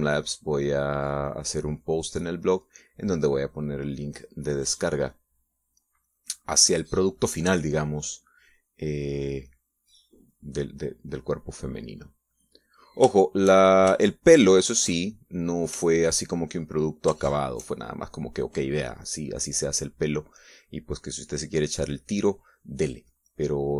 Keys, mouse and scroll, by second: 5.1 click, 7.2 click, 8.7-10.4 drag, 10.6-11.9 drag, 12.2-13.2 drag, 13.4 click, 14.3-16.4 shift+middle drag, 17.0 shift+middle click, 18.4 shift+click, 23.6-23.7 drag.